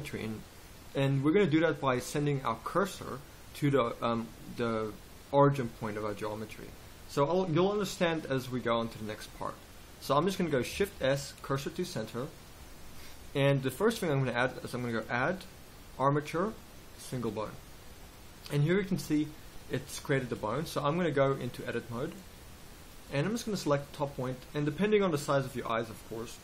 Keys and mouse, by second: 10.9 shift+s, 21.0 middle click, 21.5-23.0 drag, 23.0-26.1 middle drag.